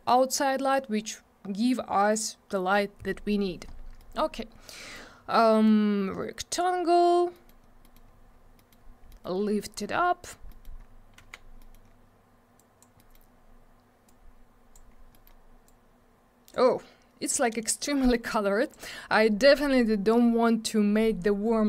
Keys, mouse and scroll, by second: 3.9 middle click, 4.1 scroll down 1, 4.2 scroll up 1, 4.7 middle click, 5.6 click, 7.3 middle click, 7.4 middle click, 7.6 scroll down 1, 7.8 middle click, 7.9 double middle click, 8.0-8.5 scroll up 1, 8.5 middle click, 8.7 middle click, 9.1 middle click, 9.2 middle click, 9.3-10.2 scroll down 1, 10.4 middle click, 10.6 middle click, 10.7 scroll up 1, 11.1 w, 11.5 middle click, 11.7 middle click, 11.8 scroll up 1, 12.5 click, 12.9 middle click, 13.1 middle click, 13.2 scroll up 1, 14.0 click, 14.8 scroll up 1, 15.1 middle click, 15.2 middle click, 15.6 click, 17.8 click.